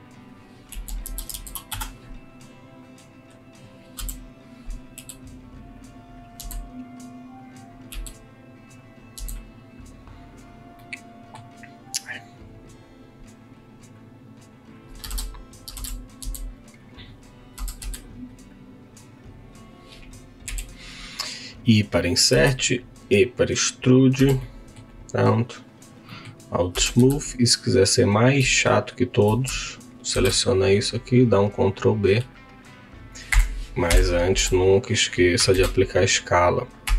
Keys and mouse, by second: 0.6-1.5 typing, 2.1 KP_Enter, 2.8 click, 3.9 KP_1, 4.9 g, 5.7 click, 6.3 s, 7.4 click, 7.9 g, 9.2 s, 10.7 middle click, 11.9 click, 14.1 click, 16.2 s, 17.8 Tab, 17.8 3, 18.0 click, 20.5 i, 22.8 e, 23.9 click, 24.2 Tab, 24.3 middle click, 25.0 right click, 26.0 middle click, 26.7 Tab, 27.1 2, 27.8 click, 30.1 ctrl+b, 33.3 Escape, 34.3 Escape, 34.6 Tab, 35.5 ctrl+a, 36.8 Tab.